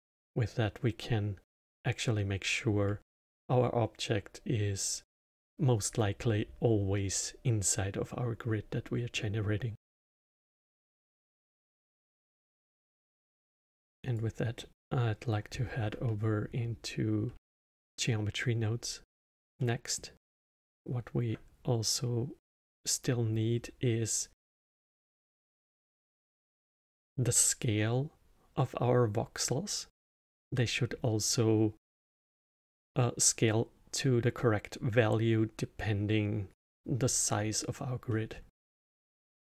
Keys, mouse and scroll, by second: 9.1-10.5 middle drag, 10.5 click, 10.8 click, 11.3 middle drag, 11.5 click, 11.7 click, 12.1 click, 12.3-13.4 middle drag, 13.5 click, 13.6 middle click, 13.7 click, 14.5-17.7 middle drag, 19.5-23.4 middle drag, 30.5-33.6 middle drag, 38.0-38.7 middle drag, 38.7-39.3 scroll up 2.